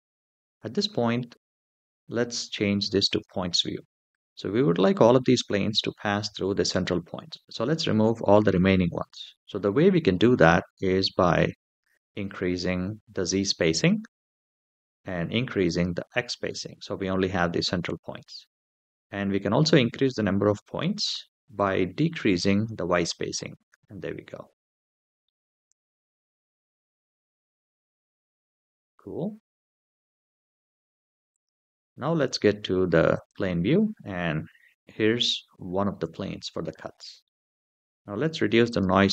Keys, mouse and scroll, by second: 2.9 click, 4.4 scroll up 3, 12.1-13.4 drag, 15.4 click, 18.6-19.7 scroll up 4, 21.3-23.1 drag, 24.4 click, 25.0 middle drag, 25.6-27.0 scroll up 4, 27.0-27.5 scroll down 5, 28.0 middle drag, 31.1 click, 32.9 click, 33.8-35.1 middle drag, 35.5 shift+middle drag, 36.1-36.4 scroll down 2, 36.4-37.0 middle drag, 38.5-39.1 drag.